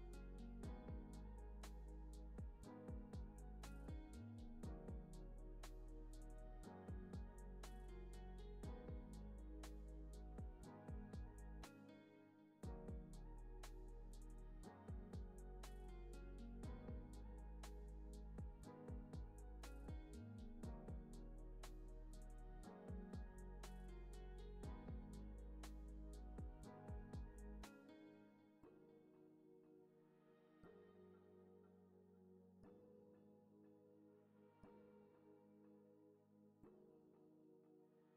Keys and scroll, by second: 4.0 space, 5.8 space, 9.0 super+c, 9.2 super+v, 10.0 super+c, 10.7 super+c, 10.9 super+v, 11.3 space, 13.1 space, 13.3 super+s, 20.3 n, 20.8 super+s, 24.1 super+c, 24.3 super+v, 31.4 z, 33.2 super+c, 33.3 super+v, 34.2 super+s, 37.2 super+c, 37.5 super+v.